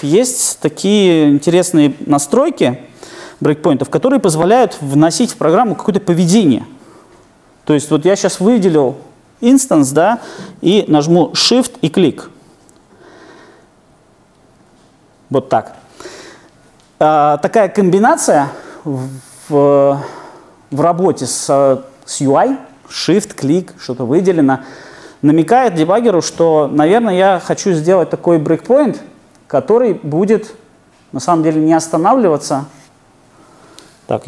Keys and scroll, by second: 14.8 super+F8.